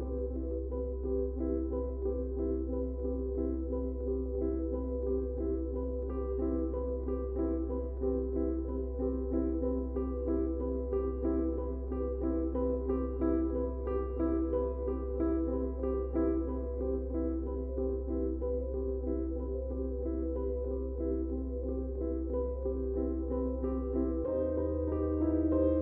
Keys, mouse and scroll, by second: 2.7 click, 5.1 click, 8.5-9.8 drag, 9.8 right click, 12.5 click, 15.5-24.6 drag.